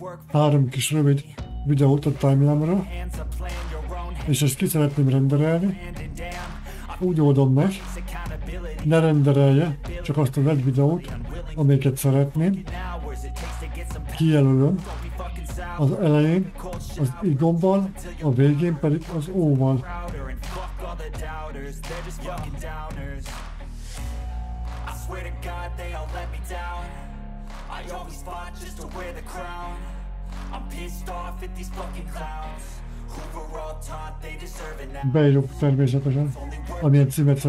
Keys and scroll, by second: 15.1 z, 19.7-22.2 typing, 24.4-28.4 typing, 24.9 Left, 37.0 v.